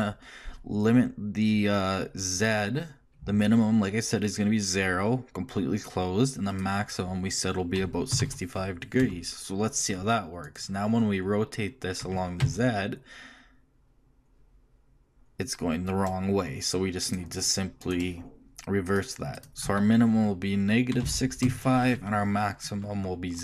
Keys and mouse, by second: 12.0 r, 17.8-19.5 drag, 19.5 BackSpace.